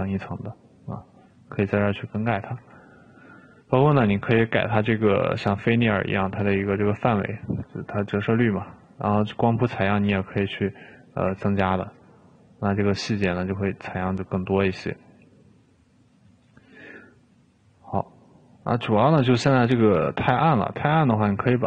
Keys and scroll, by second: 3.8 5, 11.8 2.